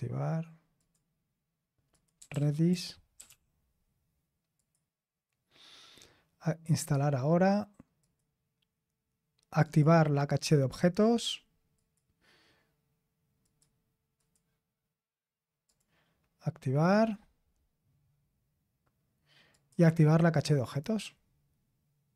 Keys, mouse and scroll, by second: 0.7 click, 1.9 click, 2.0-3.7 typing, 4.5 click, 6.8 click, 8.0 click, 9.6 click, 11.7 click, 13.4 click, 14.1 click, 15.6 click, 19.5 click.